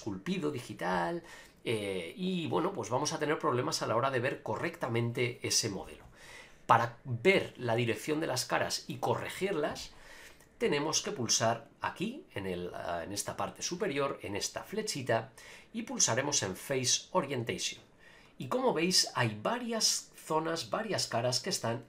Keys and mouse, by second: 7.4-8.9 middle drag, 14.7-18.1 drag, 18.4-21.8 middle drag.